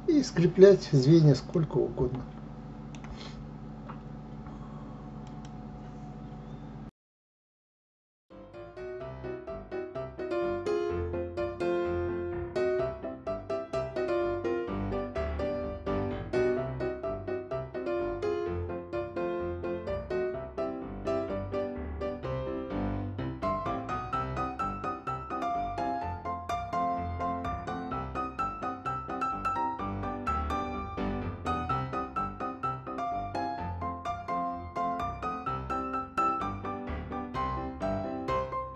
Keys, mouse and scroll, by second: 0.1 scroll down 4, 1.1-6.8 middle drag, 8.0 KP_3, 10.1 shift+a, 10.5-11.3 scroll down 7, 11.3 r, 13.4 s, 15.1-17.3 scroll up 7, 17.3 g, 22.2-23.8 middle drag, 25.1 s, 27.8 g, 30.2-31.2 middle drag, 33.0 click, 33.9 click, 35.7 l, 38.1 p.